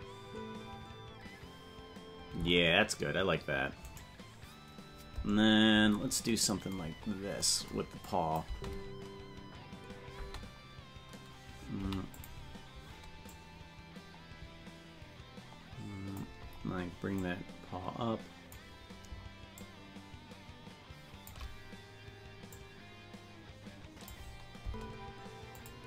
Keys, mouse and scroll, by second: 2.5 space, 4.2 right click, 5.8-6.3 scroll up 6, 7.0 scroll up 1, 8.1 click, 8.5 space, 10.3 space, 11.8 i, 13.4-16.4 drag, 17.2-18.6 drag, 19.6-21.3 shift+drag, 22.5-24.1 drag, 24.6 space, 25.7 click.